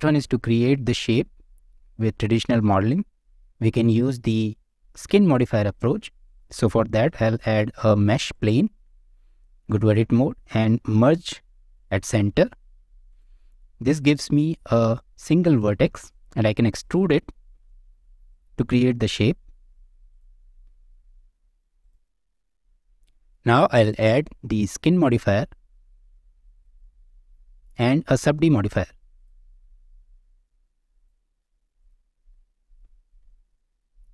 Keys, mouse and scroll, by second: 7.1 shift+a, 9.7 Tab, 11.1 m, 17.5 e, 18.9 middle click, 19.4 e, 20.6 e, 22.3 Tab, 22.6 click, 23.8-26.6 drag, 27.8-29.2 drag, 30.9 click, 31.8 click, 32.1 scroll up 1, 32.3-32.7 middle drag, 32.9 scroll down 1, 33.3 shift+middle click.